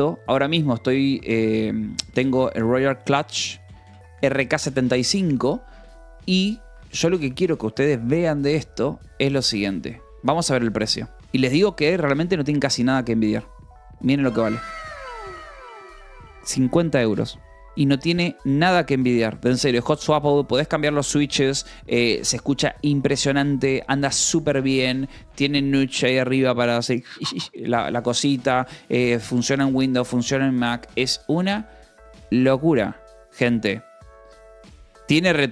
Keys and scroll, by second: 2.0 Return, 2.3 f, 2.5 s, 4.8 Down, 5.5 Return, 6.3 f, 7.1 Escape, 9.5-11.2 typing, 11.8 Return, 12.6 j, 17.7 Delete.